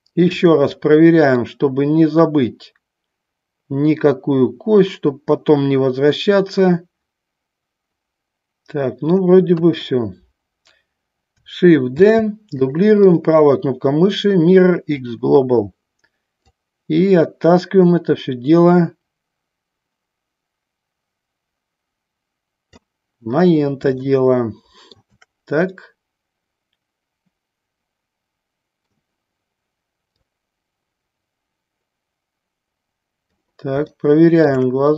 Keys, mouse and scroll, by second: 1.5-9.4 middle drag, 9.6 KP_1, 12.2 shift+d, 15.0-16.8 right drag, 16.8-22.9 drag, 24.3 shift+middle click, 25.8-29.0 middle drag, 30.4-33.4 drag, 34.1 shift+middle click.